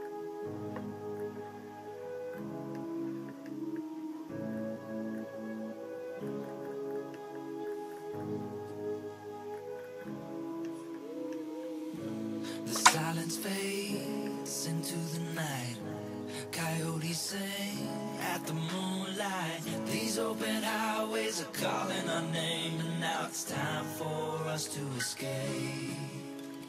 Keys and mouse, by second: 1.1 click, 2.7-3.2 middle drag, 3.4-3.7 middle drag, 6.2 click, 6.4 click, 6.6 click, 6.9 click, 7.1 middle click, 7.6 click, 7.8 click, 8.1 click, 8.8 f, 9.7 click, 10.0 click, 10.6 middle click, 11.3 middle click, 14.2 middle click, 15.7 click, 15.9 click, 16.0 click, 16.2 middle click, 17.1 middle click, 17.6 click, 17.8 click, 18.1 click, 18.2 click, 18.4 click, 18.8 click, 19.0 middle click, 20.6 click, 20.9 click, 22.1 middle click, 23.5 click, 24.6 shift+middle click, 25.3 click, 25.9 click.